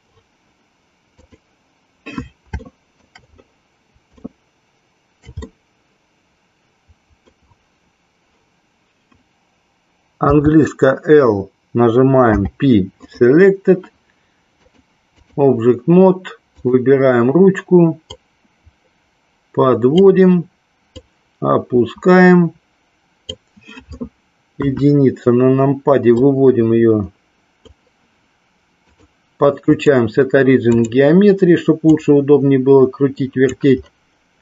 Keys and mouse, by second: 1.2 click, 2.6 shift+middle click, 4.1-5.2 shift+middle drag, 5.4-7.4 middle drag, 14.6 click, 16.6 click, 18.1-20.0 drag, 20.9-23.4 drag, 24.6 KP_1, 26.2-27.7 drag, 29.0-31.0 drag, 31.9-33.5 drag.